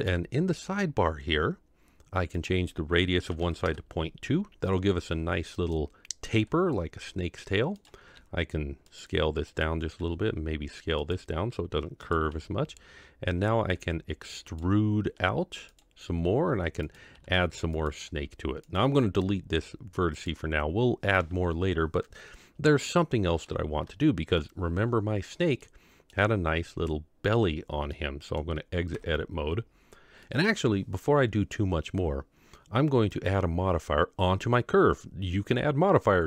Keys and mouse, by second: 0.0 n, 2.5-3.7 drag, 5.5 click, 6.3 g, 8.1 s, 9.5 click, 10.0 s, 12.1 click, 12.3 g, 13.8 e, 15.2 r, 16.1 g, 17.2 r, 18.0 g, 19.3 x, 22.9-23.4 middle drag, 24.0-24.4 shift+middle drag, 25.6-26.1 middle drag, 27.9-28.3 middle drag, 28.9 Tab, 30.2-30.5 middle drag, 33.1 click.